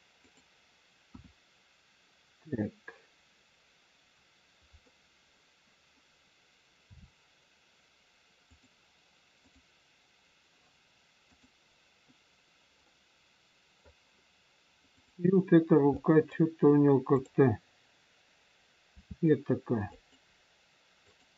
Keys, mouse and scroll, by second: 1.0 KP_1, 6.8 r, 9.3 click, 12.9 click, 12.9 middle click, 14.9 click, 15.9 middle click, 17.0 click, 18.9 r, 21.1 click.